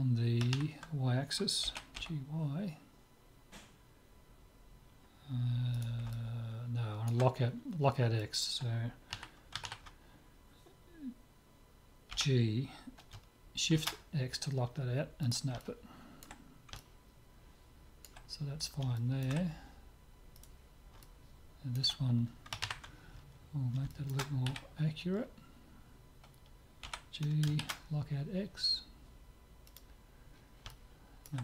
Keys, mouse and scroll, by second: 1.6 g, 6.1-8.1 middle drag, 8.2-9.9 middle drag, 9.1 KP_3, 9.7 ctrl+KP_3, 12.1 g, 15.6-20.8 middle drag, 20.4-22.1 drag, 21.0-22.8 middle drag, 23.4-26.9 middle drag, 24.5 z, 26.9 g, 30.3-31.4 middle drag.